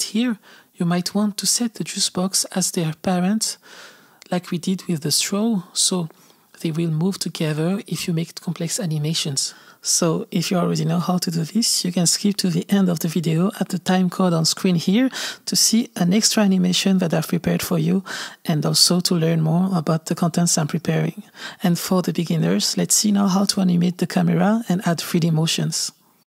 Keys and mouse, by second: 0.0 click, 0.6 g, 5.9 click, 7.1 g, 9.5-10.9 drag, 13.2 click, 13.5 right click, 15.4 click, 15.6 space, 16.8 space, 16.9 click, 17.8 i, 18.6 click, 19.3 space, 22.3 space, 22.4 click, 22.5 space, 23.6 space, 25.0 click, 25.2 click, 25.3 click, 26.1 click.